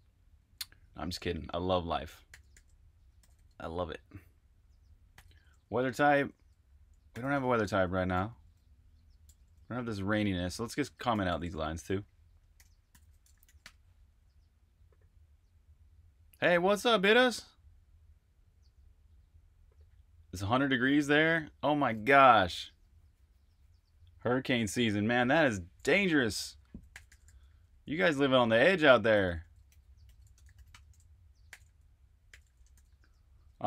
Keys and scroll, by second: 2.3-3.3 typing, 4.8-9.3 typing, 10.8-14.0 typing, 26.2-32.7 typing.